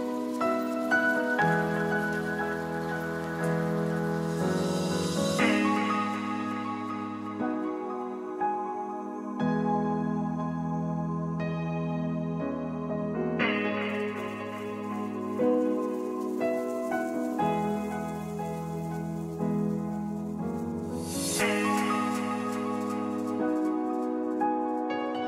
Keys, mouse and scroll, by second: 2.4 click, 2.7 shift+d, 6.0 Tab, 6.2 Tab, 6.9 p, 7.4 right click, 7.7 click, 9.0 Tab, 9.5 x, 10.0 Tab, 12.2 click, 13.3-14.0 right drag, 14.3-15.9 middle drag, 16.8-17.3 right drag, 17.4 Tab, 17.7 right click, 18.4 shift+s, 19.0 Tab, 19.3 ctrl+alt+shift+c, 20.6 click, 21.4 s, 22.7 KP_Decimal, 24.6-25.2 drag.